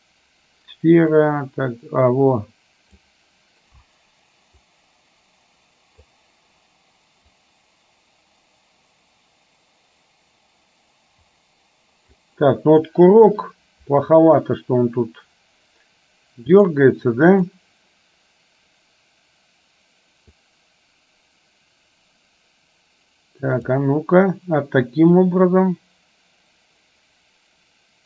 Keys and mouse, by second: 1.2-3.2 drag, 4.8-6.2 drag, 7.7-12.5 drag, 16.6 click, 17.5 click, 20.5-23.8 drag, 25.5-28.0 drag.